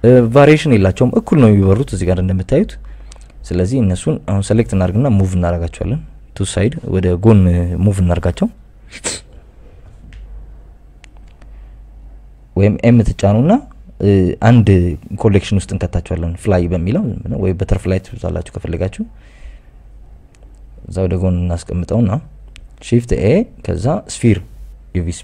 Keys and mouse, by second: 0.8 KP_8, 2.0 click, 3.3 click, 4.4 click, 4.8 click, 7.4 click, 8.6 ctrl+m, 9.9 Escape, 10.0 Escape, 10.3 Escape, 10.9 ctrl+z, 12.0 click, 13.5 click, 14.3 m, 19.8 click, 20.9 click, 22.4 shift+a, 23.4 g, 23.9 x.